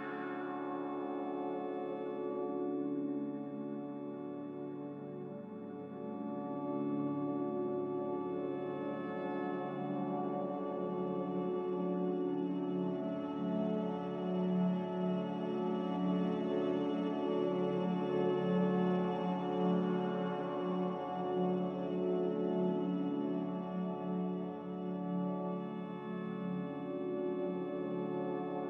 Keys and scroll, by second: 4.6 x, 5.9 Return, 8.8-10.5 typing, 10.5 Delete, 25.4 z, 27.3 ctrl+z.